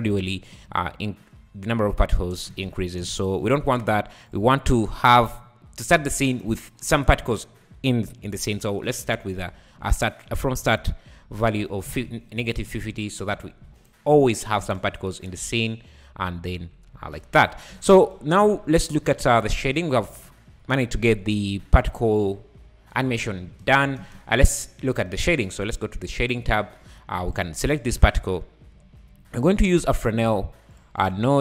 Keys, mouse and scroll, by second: 2.2-2.5 scroll down 2, 2.5 space, 3.0 space, 3.2 click, 4.3 click, 8.3-11.5 drag, 13.8 shift+Right, 13.8 right click, 14.6 space, 16.4-17.7 typing, 17.2 scroll up 2, 18.6-19.0 scroll up 5, 19.0 `, 19.4-19.8 scroll down 4, 19.8 `, 21.2-21.6 scroll up 2, 23.5 space, 24.0 space, 24.2-24.5 scroll down 3, 26.3 click, 26.6 scroll down 6, 26.8 `, 27.3 click, 27.7 click, 28.4-28.8 scroll up 5, 28.8 `.